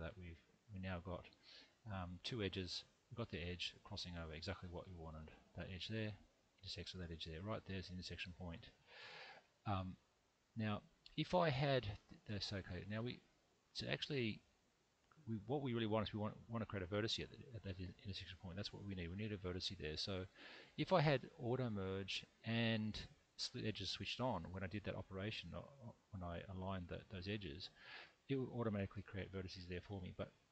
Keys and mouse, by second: 2.5 2, 3.5 click, 4.6 middle click, 6.6 shift+click, 7.0 middle click, 10.0-11.0 middle drag, 13.0 click, 14.9 click, 15.5 middle click, 19.2 middle click, 21.8 click, 22.7 click, 23.5 click.